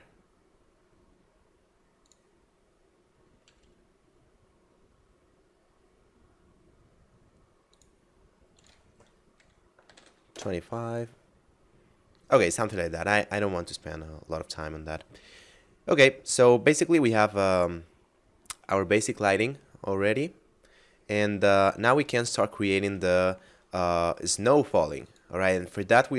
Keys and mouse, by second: 2.1 click, 3.5 g, 7.4 click, 9.7 2, 10.0 5, 10.3 Return, 12.4 middle click, 20.4 middle click, 25.1 click.